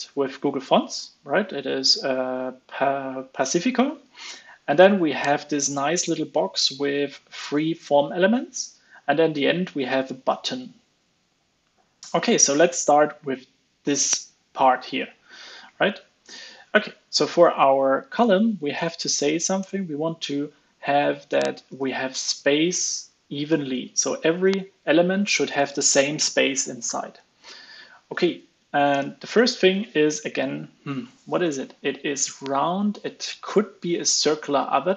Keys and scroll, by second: 23.8 super+s, 28.8 super+Tab.